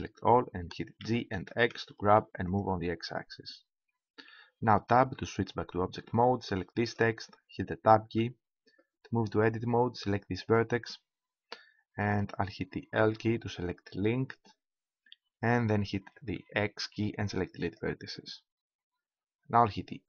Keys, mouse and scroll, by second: 1.0 g, 2.7-4.2 drag, 5.0 Tab, 6.8-8.4 drag, 8.4 Tab, 10.4-12.1 drag, 13.1 l, 16.7 x.